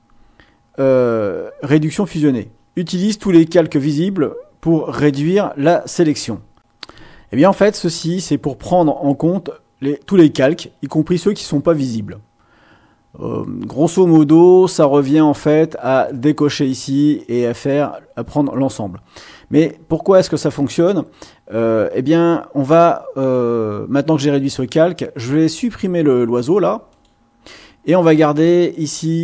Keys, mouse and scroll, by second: 6.6 click, 10.8 click, 16.0 click, 23.2 click, 25.2 click, 26.9 click.